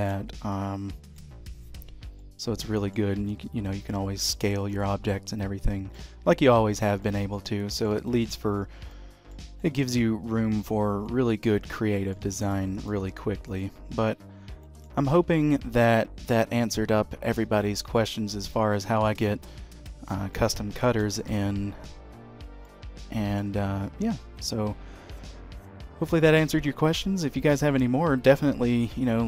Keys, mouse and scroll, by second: 0.3-0.8 scroll down 4, 0.6 middle click, 2.0-2.4 scroll up 2, 2.3 middle click, 3.3 s, 4.8 middle click, 6.6 h, 6.8-7.7 scroll down 3, 7.2 middle click, 8.2 shift+middle click, 8.7-9.0 scroll up 2, 9.0 middle click, 9.7 shift+middle click, 11.2 middle click, 12.5 shift+middle click, 12.8 click, 13.4 x, 14.0 scroll up 1, 14.8 shift+middle click, 15.3 shift+a, 20.5 middle click, 21.1 shift+middle click, 22.5 scroll up 1, 22.8 middle click.